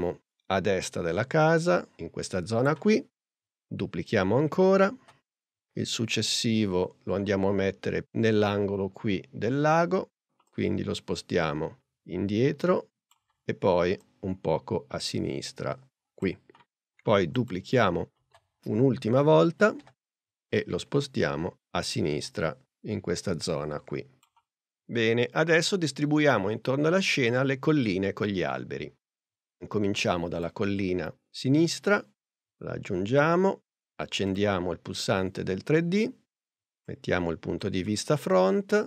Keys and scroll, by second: 5.0 super+d, 6.5 p, 18.2 super+d, 19.8 p.